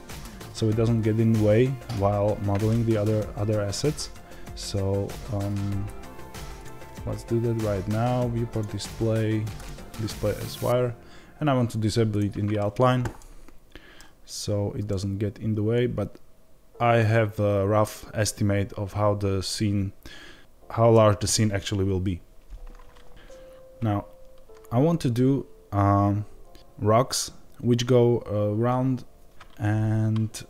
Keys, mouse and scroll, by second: 6.9-13.1 drag, 6.9-8.4 scroll down 2, 13.1-30.4 middle drag.